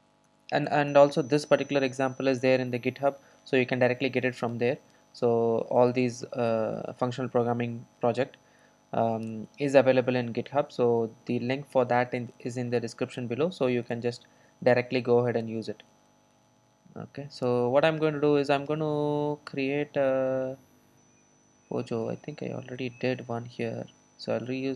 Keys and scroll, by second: 14.1 ctrl+shift+super+F12.